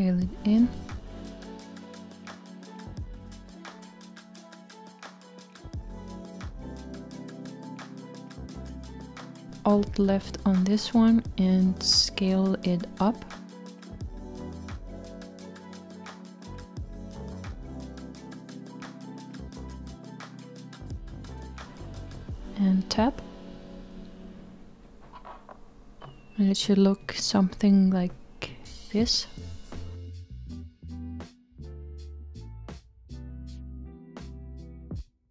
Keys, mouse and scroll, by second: 6.8-9.0 middle drag, 9.0-11.0 scroll up 1, 11.1 alt+click, 14.5 s, 25.7 Tab, 28.4-34.5 middle drag.